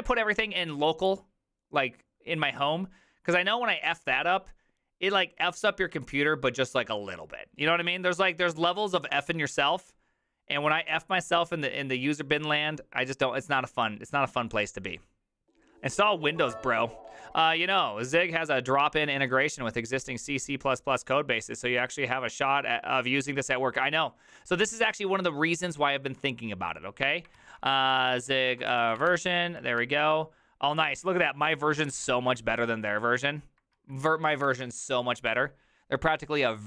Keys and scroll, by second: 27.4 alt+{, 27.6-31.4 typing, 33.8 alt+{, 34.5 alt++.